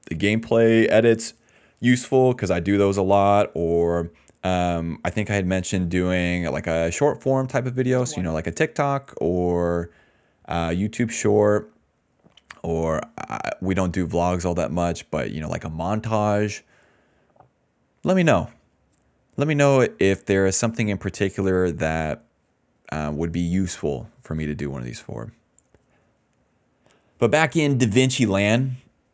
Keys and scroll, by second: 0.3 ctrl+z, 0.5 ctrl+z, 0.6 ctrl+z, 0.9 ctrl+z, 1.1 ctrl+z, 1.4 ctrl+z, 1.6 ctrl+z, 1.8 ctrl+z, 2.1 ctrl+z, 2.4 ctrl+z, 2.6 ctrl+z, 2.9 ctrl+z, 7.7 space, 8.0 d, 8.2 space.